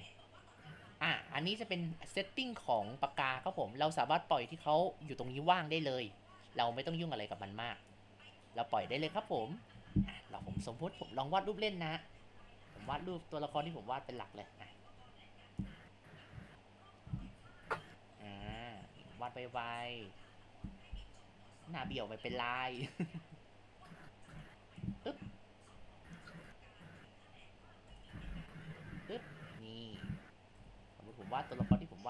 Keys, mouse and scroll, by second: 0.0-2.2 drag, 2.8-5.9 drag, 8.4 click, 12.1-13.6 drag, 13.6 ctrl+z, 13.8-17.2 drag, 17.7 click, 18.8-24.4 drag, 24.4 Tab, 24.9 click, 25.8 g, 27.4 g, 27.9 Tab, 28.7-30.7 drag, 30.7 ctrl+z, 31.0-32.0 drag.